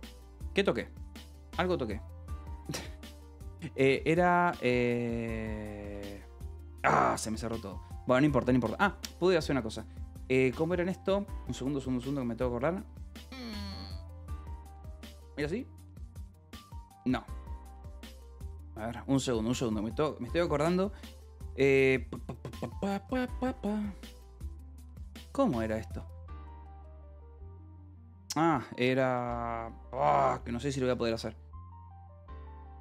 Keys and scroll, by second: 0.0-1.3 typing, 1.1 Escape, 2.4-6.4 typing, 15.2 alt+s, 15.7 o, 16.7 Escape, 18.2 Escape, 23.9 BackSpace, 25.0 BackSpace, 27.6 alt+v, 29.2 space, 29.8 BackSpace, 31.1 s, 32.2 Escape.